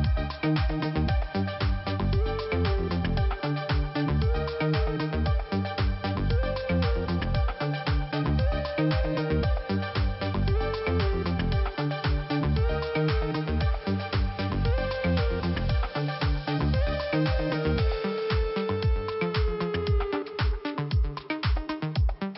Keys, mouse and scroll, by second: 2.1 click, 2.5 click, 2.6 double click, 3.1 double click, 5.2 click, 6.2 click, 8.4 click, 12.0 click, 12.1 click, 13.1 click, 16.1 click, 18.8 click, 19.4 click, 20.4 click, 21.9 click.